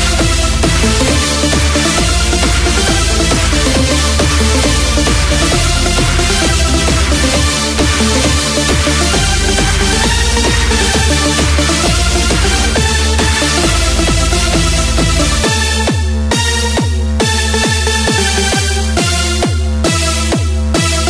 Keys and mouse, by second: 0.1 KP_4, 0.8 KP_4, 6.1 n.